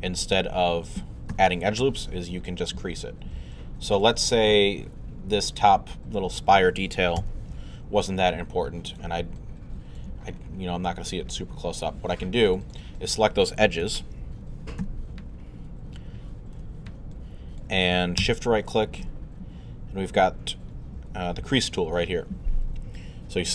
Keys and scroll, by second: 1.3 1, 7.2 w, 13.8 alt+w, 14.4-15.3 typing, 16.6 1.